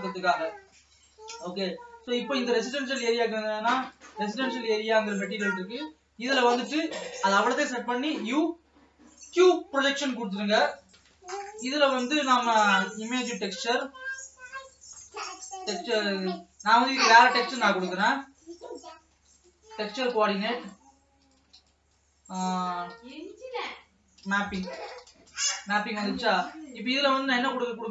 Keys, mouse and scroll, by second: 3.8 click, 4.7-5.4 scroll down 2, 9.6 u, 12.2-15.4 drag, 15.4 shift+d, 16.5 shift+d, 19.8 shift+a, 22.9 shift+a.